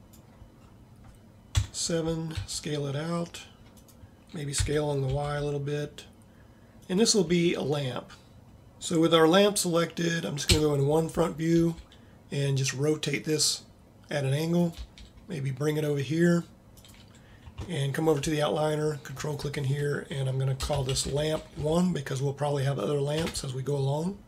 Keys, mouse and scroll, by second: 1.5 KP_7, 2.4 s, 4.7 s, 8.5 a, 10.6 KP_1, 11.6 r, 14.8 g.